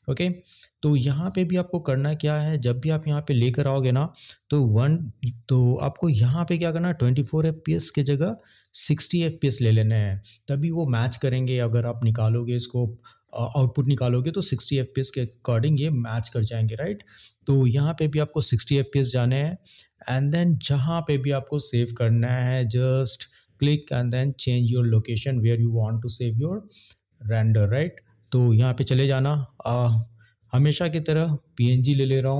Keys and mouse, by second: 2.3 click.